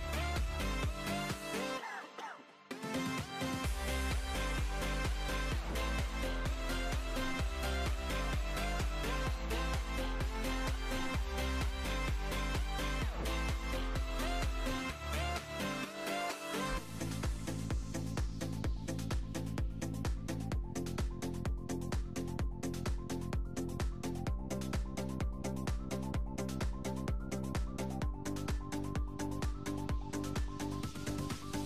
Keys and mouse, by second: 0.8 Tab, 1.1 Tab, 1.4 KP_7, 1.7 Tab, 1.9 Tab, 2.5-5.1 typing, 5.8 Tab, 6.4 e, 6.6 e, 6.8 r, 6.8 g, 8.2 Tab, 8.4 g, 9.3 Tab, 9.4 ctrl+r, 9.6 g, 10.3 g, 11.1 g, 13.1-15.4 typing, 16.3 Tab, 16.5-19.1 typing, 22.5 KP_1, 22.7 z, 26.5 click, 26.6 shift+a, 27.1 s, 27.6 g, 28.4 click, 28.7 Tab, 30.4 z, 31.2 Tab.